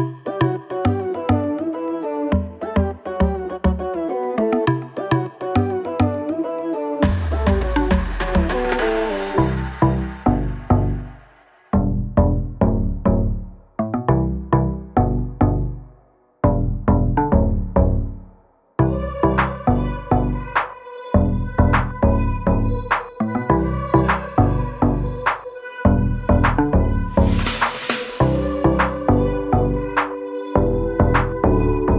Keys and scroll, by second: 2.0 space, 2.6 Delete, 3.8 m, 5.0 space, 5.3 p, 6.3 space, 6.9 Delete, 9.7 p, 11.7 space, 12.1 e, 13.0 space, 13.3 p, 18.2 space, 19.0 Delete, 21.1 ctrl+z, 22.4 p, 23.3 space, 23.8 p, 24.9 space, 25.6 p.